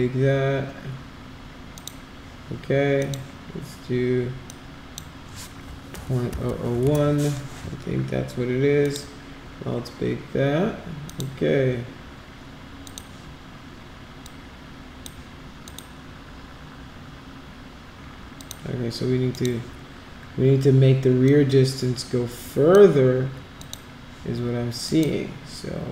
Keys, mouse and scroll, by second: 1.7 click, 3.0 click, 4.4 click, 6.4 0, 6.8 Return, 8.8 click, 11.1 click, 12.8 click, 14.2-15.0 drag, 15.6 click, 18.4 click, 19.3 click, 21.2-22.7 drag, 23.5 click, 24.8 click.